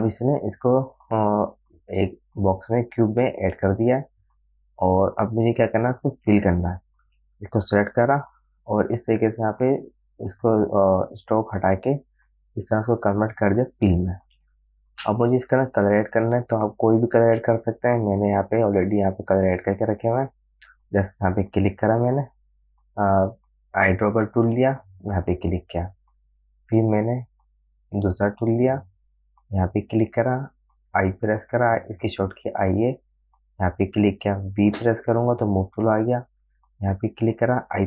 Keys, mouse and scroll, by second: 4.5-10.3 drag, 12.8 click, 14.8 space, 15.0 click, 15.3 space, 16.0 alt+scroll down 1, 16.8 alt+space, 17.0 click, 17.6 space, 19.7 click, 23.4 i, 25.5 click, 27.8 click, 31.3 i, 35.1 v, 36.9 click.